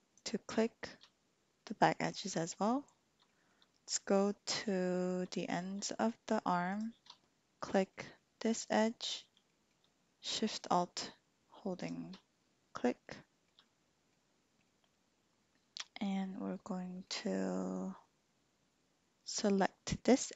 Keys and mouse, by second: 0.1 alt+shift+click, 1.6-2.6 drag, 3.3 shift+click, 3.7 middle click, 4.8 shift+click, 6.5 alt+shift+click, 7.7 click, 8.1 shift+click, 9.5 shift+click, 13.2 shift+click, 13.6 click, 14.7 click, 15.1-17.1 middle drag.